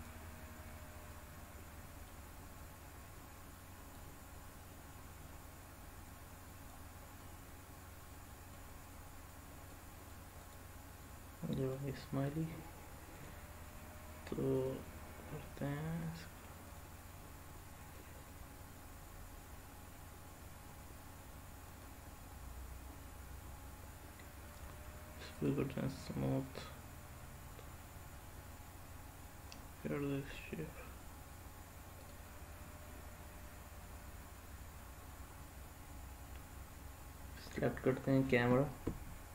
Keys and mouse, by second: 0.0 click, 1.1-2.1 middle drag, 4.0-6.7 drag, 7.2-8.6 middle drag, 9.7 middle click, 11.0-11.8 middle drag, 16.6 click, 21.8 click, 24.5-25.5 right drag, 26.6-30.3 middle drag, 32.0 click.